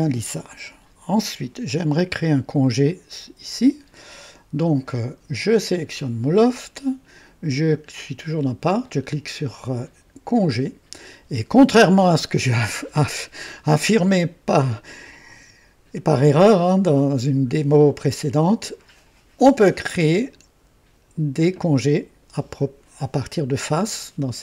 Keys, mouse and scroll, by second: 1.7 click, 5.7 click, 10.2 click, 19.3 click.